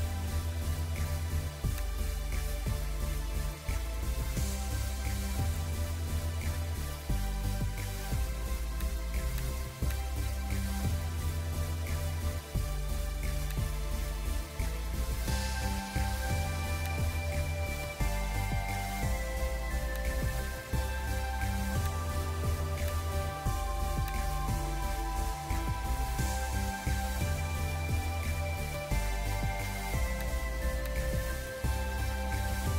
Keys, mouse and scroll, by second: 0.2 b, 3.0-6.5 typing, 14.6 ctrl+j, 16.1 scroll up 1, 19.8 alt+click, 27.2 scroll up 1, 27.4-28.7 scroll down 1, 31.5 scroll down 1, 32.7 ], 32.7 ].